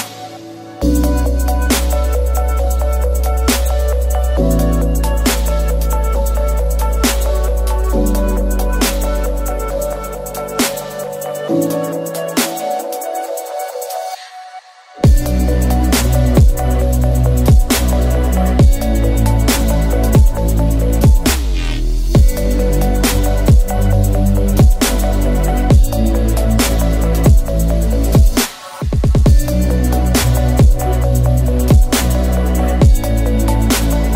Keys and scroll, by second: 0.9 F2, 1.6 8, 4.8 Tab, 7.6 Tab, 8.1-10.1 typing, 8.3 Return, 8.4 Return, 10.6 Tab, 11.6 F2, 13.2 Delete, 14.2 8, 14.3 F2, 24.6 8, 28.2 Tab, 28.8 typing.